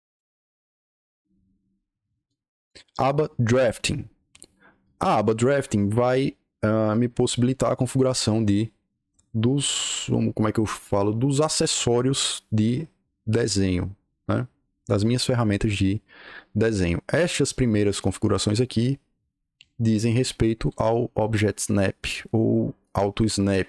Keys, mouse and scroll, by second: 2.2 click, 5.2-7.7 drag.